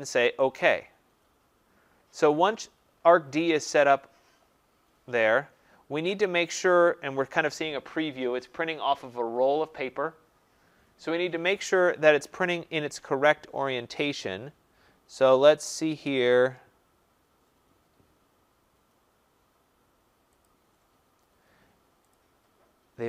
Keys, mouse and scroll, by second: 0.6 click, 20.5 click, 22.1 click.